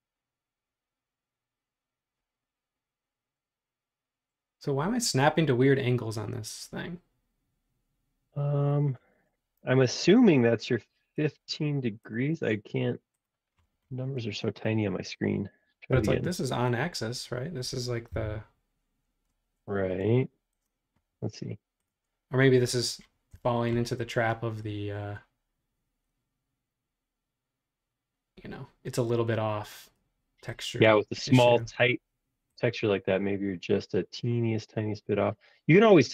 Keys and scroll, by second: 9.9 super+z, 14.2 space, 16.0 l, 18.1 Tab, 19.8 Escape, 20.0 space.